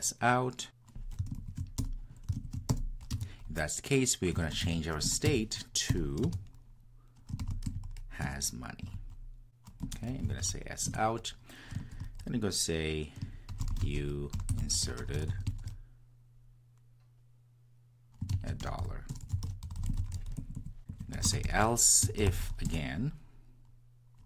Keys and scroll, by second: 5.1 Return, 10.8 Return, 22.6 Return.